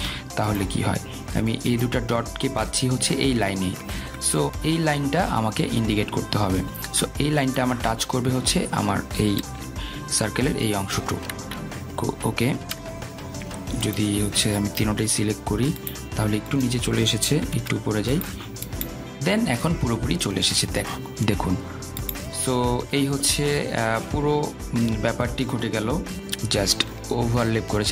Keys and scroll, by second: 11.4 shift+Down, 18.4 shift+Up.